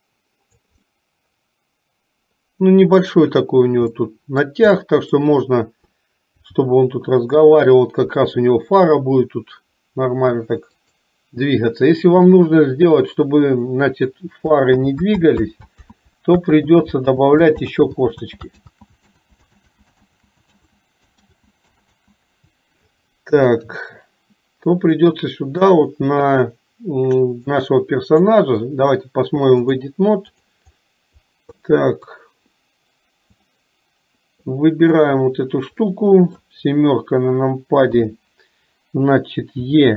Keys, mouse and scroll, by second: 1.0-3.2 middle drag, 3.9 middle click, 4.8 middle click, 25.1 middle click, 27.6 click, 29.7 click, 31.7 middle click, 33.5 click, 35.0 click, 36.0 middle click.